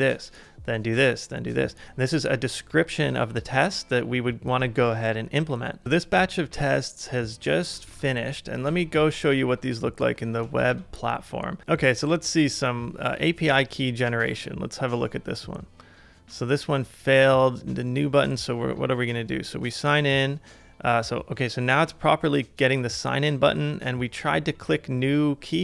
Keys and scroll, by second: 7.9 super+Tab, 8.7 super+Tab, 10.6 super+r.